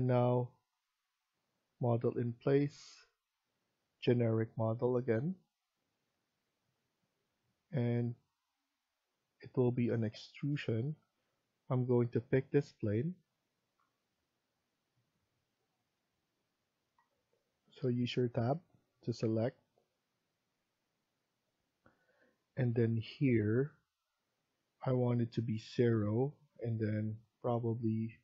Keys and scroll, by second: 17.0 Tab, 17.4 Tab.